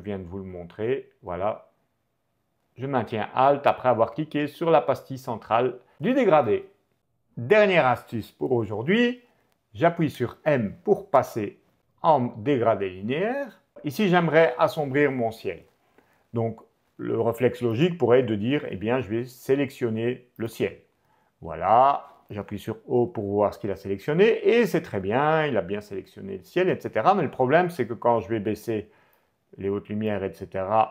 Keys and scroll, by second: 10.1 m, 22.7 ctrl+o, 24.4 o, 26.0 o.